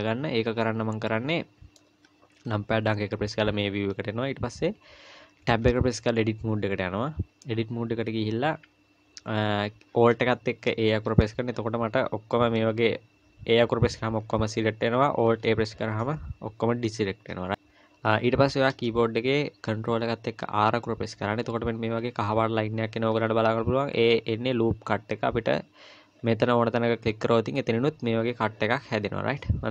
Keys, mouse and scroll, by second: 0.0-1.1 scroll down 1, 1.1 middle click, 2.5 KP_1, 3.3-3.7 scroll up 1, 5.5 Tab, 11.1 alt+a, 12.6 a, 15.3 alt+a, 17.5 click, 20.4 ctrl+r.